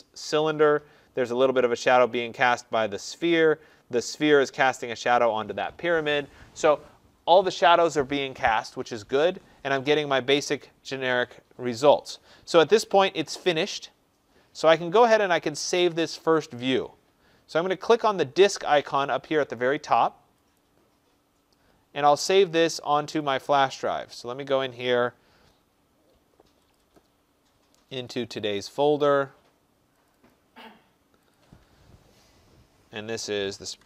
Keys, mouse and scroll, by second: 20.5 click, 23.3 click, 26.7 click, 26.9 click, 28.0 click, 28.3 click, 30.0 click, 30.2 click, 31.3 click, 33.2-33.8 typing.